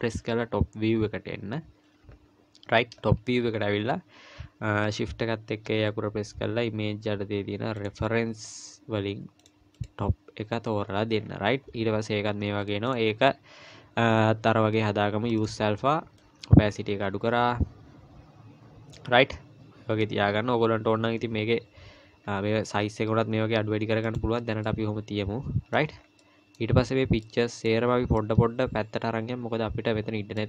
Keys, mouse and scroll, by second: 0.2 KP_7, 3.0-4.8 scroll up 2, 4.8-5.7 scroll up 1, 5.7 shift+a, 11.2-11.8 scroll down 1, 12.9 click, 12.9-14.3 scroll down 2, 15.4 click, 19.3-20.1 scroll up 2, 20.1-22.3 scroll up 3, 22.3-22.7 scroll down 1, 22.7 s, 24.6 middle click, 26.0-26.8 scroll down 4, 26.2 middle click, 26.8-27.2 scroll up 1, 27.2 middle click, 27.9 scroll down 2, 28.2 middle click.